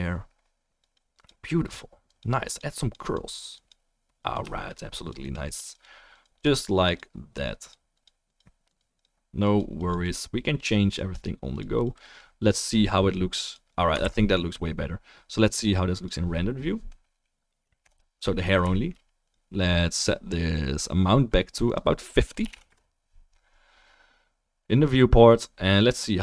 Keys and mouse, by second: 2.4-3.0 drag, 2.4-3.0 middle drag, 2.4-3.0 right drag, 13.6-18.6 ctrl+drag, 14.0 ctrl+s, 17.9 KP_0, 19.2 click, 20.4-21.6 drag.